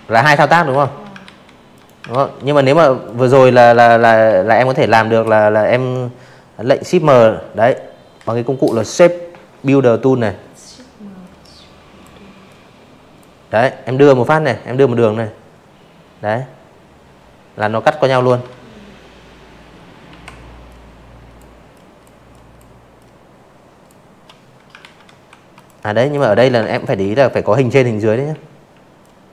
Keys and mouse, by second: 0.0 drag, 0.7 ctrl+z, 1.4 shift+click, 3.7 m, 8.2 click, 9.4 click, 15.2 ctrl+z, 16.8-17.5 typing, 17.6 click, 18.7 click, 19.2 click, 19.9 click, 21.8 ctrl+z, 22.2 v, 22.5 click, 22.9 click, 23.7 shift+click, 25.0-25.7 typing, 25.9 click, 27.9 ctrl+z.